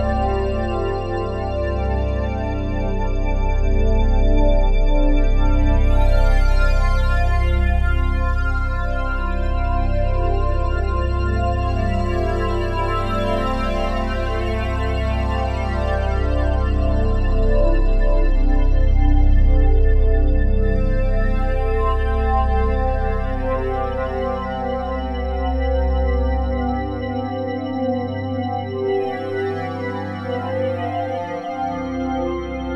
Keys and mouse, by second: 1.4 click, 3.0 ctrl+alt+click, 3.4 alt+shift+click, 4.7 ctrl+s, 6.2 click, 7.3 click, 8.7 alt+click, 9.8-15.5 alt+drag, 17.3 alt+a, 20.7 click, 21.9 click, 24.1 click, 25.4 click, 26.5 click, 27.3 alt+click, 28.4 click, 30.6 click.